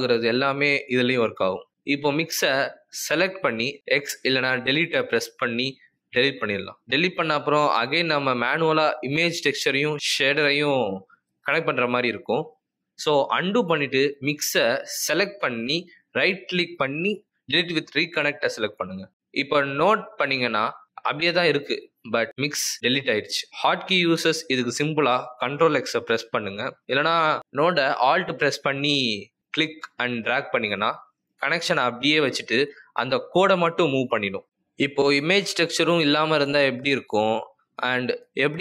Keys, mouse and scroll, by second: 1.2 click, 3.4 Delete, 8.7 click, 13.4 ctrl+z, 14.2 ctrl+z, 18.2 right click, 23.6 ctrl+z, 24.3 ctrl+x, 27.5 ctrl+z, 29.7 alt+click, 36.8 Delete.